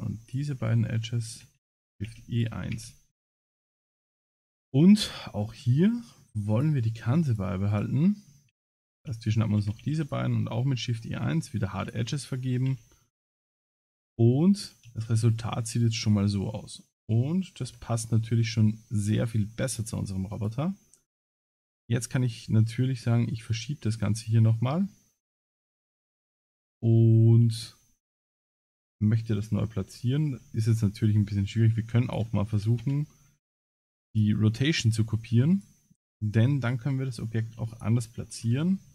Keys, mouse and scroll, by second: 0.3 shift+click, 0.7 middle click, 1.2 shift+click, 1.8 shift+e, 2.8 Tab, 3.1 middle click, 3.8 Tab, 4.8 middle click, 6.6 click, 7.3 click, 8.3 middle click, 8.9 shift+click, 9.6 shift+e, 10.7 middle click, 11.9 click, 12.4 middle click, 12.7 a, 13.0 middle click, 13.9 Tab, 14.2 middle click, 14.9 ctrl+s, 15.3-15.9 scroll down 3, 15.8 middle click, 17.7 KP_Divide, 19.1 middle click, 20.3 click, 21.4 g, 26.6 g, 29.8 KP_1, 31.3 middle click, 32.1 shift+click, 32.8 ctrl+c, 34.8 middle click, 35.5 click, 36.1 middle click, 37.7 shift+click, 38.4 KP_Divide.